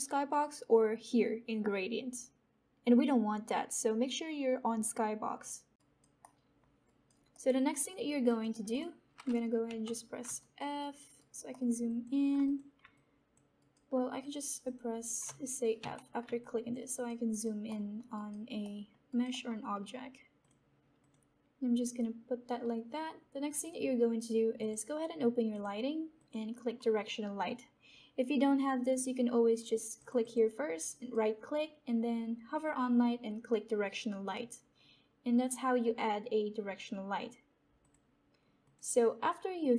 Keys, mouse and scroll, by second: 5.7 alt+click, 6.1 alt+right click, 6.4 alt+middle click, 6.8 alt+right click, 7.2 alt+middle click, 7.8 alt+right click, 8.2 alt+click, 8.6 click, 10.2 f, 10.3 alt+right click, 11.5 alt+middle click, 12.2 alt+click, 12.9 alt+click, 13.5 alt+right click, 13.9 alt+right click, 14.2 click, 16.3 alt+click, 16.9 alt+right click, 17.6 alt+middle click, 18.1 alt+right click, 18.5 alt+middle click, 19.2 alt+right click, 19.7 alt+middle click, 20.3 click, 22.4-23.4 scroll up 1, 23.4-25.5 scroll up 1, 25.5 click, 28.8 click, 30.7-33.7 right drag, 37.7 click, 39.5 click.